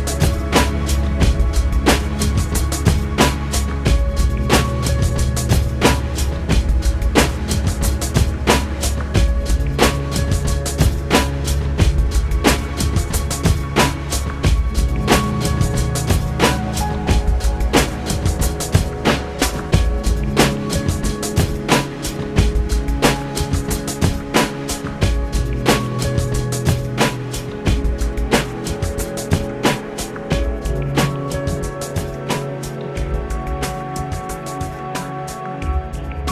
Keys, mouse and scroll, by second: 1.1 click, 2.6 click, 6.3 click, 11.5 click, 13.5 Delete, 14.9 click, 17.0 click, 18.6 middle click, 19.6-20.2 scroll up 3, 21.2-22.5 middle drag, 22.5-23.2 scroll up 4, 23.8-26.7 shift+middle drag, 33.5 shift+middle click, 34.8-35.3 scroll down 4.